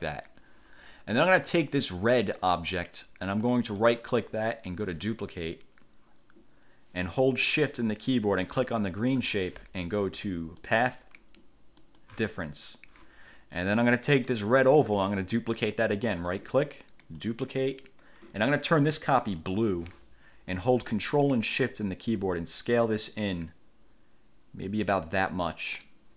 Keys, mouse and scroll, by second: 2.6 click, 4.0 click, 5.0 click, 8.6 shift+click, 10.8 click, 12.0 click, 14.4 click, 16.4 right click, 17.2 click, 19.6 click, 22.4-26.1 ctrl+shift+drag.